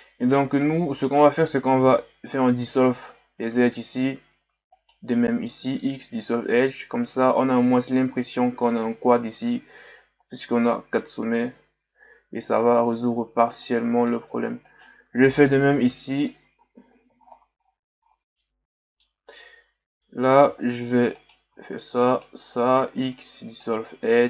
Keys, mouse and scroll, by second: 0.3 scroll up 1, 0.6-1.8 middle drag, 1.8 x, 4.7 right click, 5.5 x, 12.5 Tab, 13.0-13.6 scroll down 1, 13.6-14.7 middle drag, 14.7 right click, 15.7 KP_Divide, 16.8-18.2 ctrl+scroll up 19, 18.4-19.4 middle drag, 19.4 Tab, 20.6-21.2 shift+scroll down 2, 21.2 right click, 22.1 shift+right click, 22.8 x.